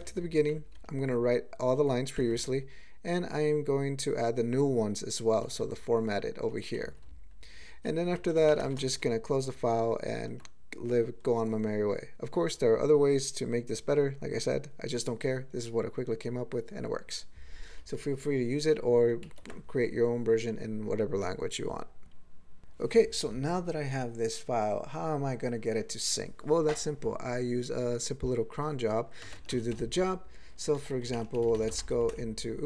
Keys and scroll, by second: 0.2 ctrl+n, 0.4 ctrl+n, 0.5 ctrl+e, 0.7 ctrl+p, 2.2 ctrl+n, 2.3 ctrl+e, 5.4 ctrl+g, 5.6-6.5 ctrl+p, 6.8 ctrl+n, 7.0-7.8 ctrl+n, 8.0 ctrl+n, 8.4 alt+m, 8.6 ctrl+space, 8.7 ctrl+e, 9.0 ctrl+g, 19.2 ctrl+g, 30.8 ctrl+g, 31.2 alt+x, 31.2-32.1 typing.